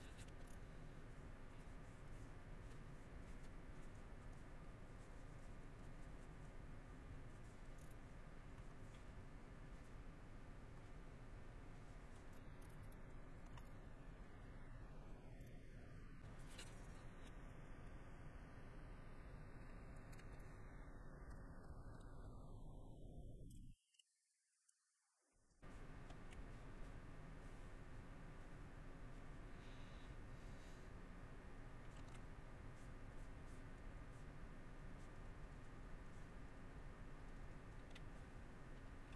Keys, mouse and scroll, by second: 0.6 middle click, 3.9 middle click, 4.7 middle click, 5.1 middle click, 5.6 middle click, 6.4 middle click, 6.9 middle click, 8.0 middle click, 8.5 shift+middle click, 10.9 middle click, 11.8 middle click, 14.5 middle click, 15.6 middle click, 24.5 shift+middle click, 29.2 middle click, 29.8 middle click, 30.5 middle click, 38.2 middle click.